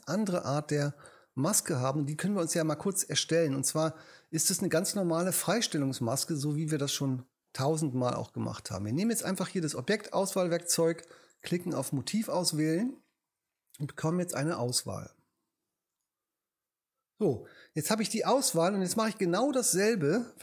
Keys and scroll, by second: 0.4 BackSpace.